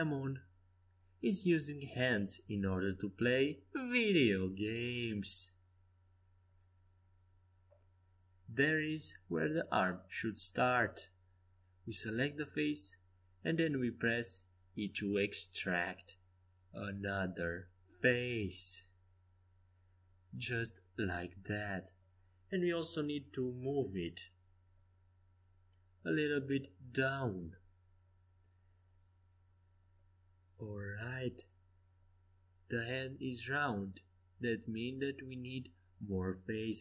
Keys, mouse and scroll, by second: 2.0 middle click, 2.6-6.9 right drag, 3.3 Tab, 4.4 Tab, 6.1 click, 7.1 click, 7.1 middle click, 7.1-8.4 right drag, 8.4 click, 8.6-12.3 middle drag, 12.8-16.1 typing, 20.6 e, 27.9 g.